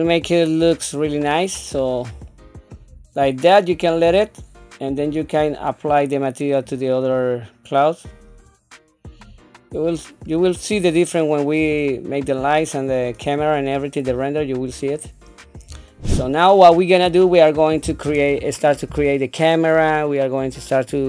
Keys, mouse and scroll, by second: 0.9 shift+middle click, 1.7 scroll up 2, 2.3 shift+middle click, 4.9 click, 8.1 click, 10.3 scroll down 2, 11.0 middle click, 11.8 shift+middle click, 12.5 scroll down 1, 13.0 middle click, 13.7 scroll up 1, 14.2 shift+middle click, 14.9 scroll up 2, 15.4 scroll down 1, 15.9 shift+middle click, 16.2 shift+middle click, 16.2 scroll down 1, 16.9 middle click.